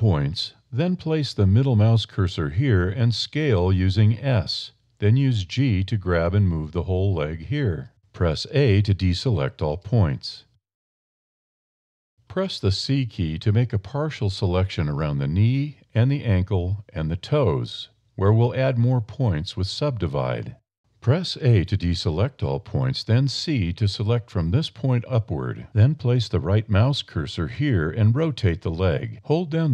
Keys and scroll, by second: 1.7 a, 2.8 s, 4.2 g, 7.6 a, 11.6 shift+a, 12.4 a, 13.0 c, 20.7 a, 22.2 c, 26.0 r, 27.5 a.